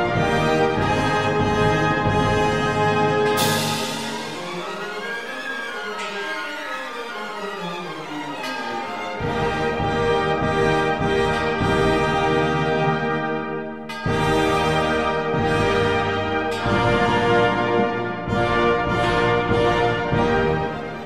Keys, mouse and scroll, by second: 0.2 shift+b, 1.9 ctrl+s, 11.2 ctrl+s, 12.8 shift+b, 14.7 ctrl+s, 16.6 click, 17.0 right click, 17.0 g, 19.5 click, 19.5 right click, 20.1 ctrl+s.